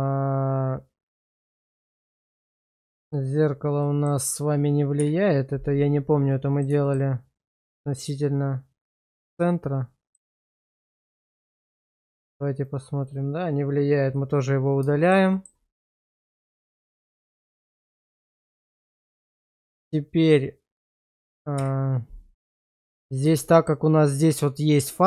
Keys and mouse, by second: 1.4 click, 2.1 click, 2.6 click, 3.0 click, 3.8 middle drag, 5.0 /, 6.3-6.6 middle drag, 6.8 shift+middle drag, 7.8-10.1 middle drag, 10.4 middle click, 12.6 click, 13.0 click, 14.1 click, 15.0 shift+middle click, 15.3 middle click, 17.4-18.4 middle drag, 18.7 shift+middle click, 19.3 middle drag, 19.7 shift+middle drag, 20.4 middle click, 22.5-22.9 middle drag, 23.4 shift+middle click.